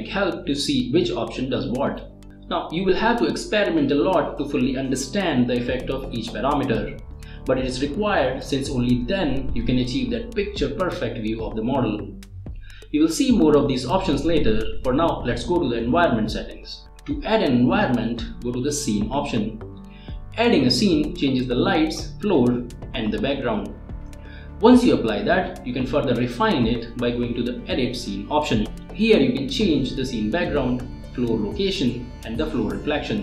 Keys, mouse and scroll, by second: 12.6 click, 14.6-15.6 drag, 17.9 scroll down 1, 19.2 scroll up 1, 20.1 click, 21.2 click, 22.1 click, 22.8-23.2 scroll up 1, 25.0 click, 25.3 space, 26.8 click, 27.1 right click, 27.6 click, 27.8 click, 28.7 scroll up 1, 29.7 click, 30.9 click, 32.7-33.2 click.